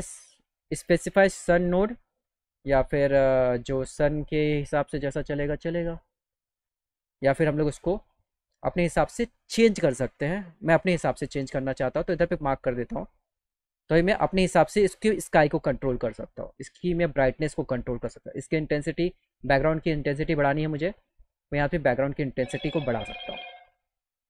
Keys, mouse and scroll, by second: 18.5 click, 20.3 click, 23.1-24.2 drag.